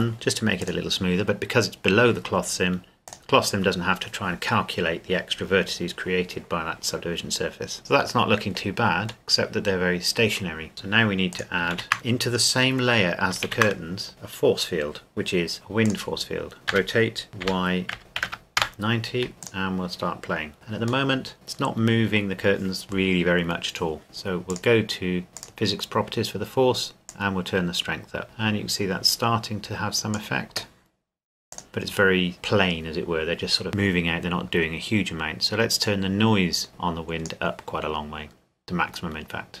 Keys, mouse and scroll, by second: 3.1 click, 7.9 middle click, 10.7 scroll down 1, 10.8-11.3 scroll up 1, 11.3 click, 11.7 shift+a, 13.5 shift+a, 15.9 click, 16.7 r, 17.4 y, 17.9 KP_Subtract, 18.2 KP_9, 18.6 KP_Enter, 19.4 click, 21.1 middle click, 24.5 click, 25.4 click, 35.8 click, 36.3 click.